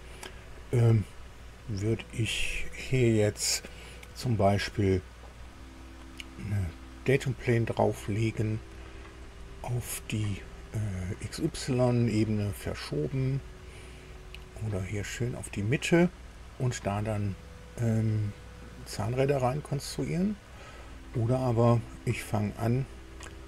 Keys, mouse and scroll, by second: 5.5-7.7 middle drag, 8.2-9.4 middle drag, 14.1 middle click, 18.9 scroll up 2, 19.9 middle click.